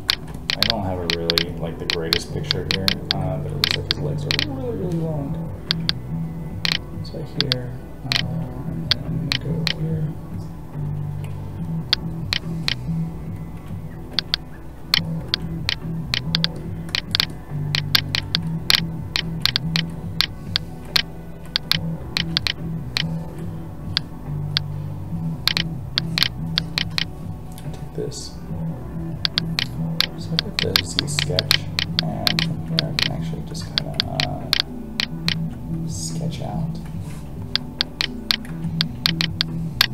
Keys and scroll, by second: 33.6 ctrl+z, 35.3 ctrl+z, 38.5 ctrl+z.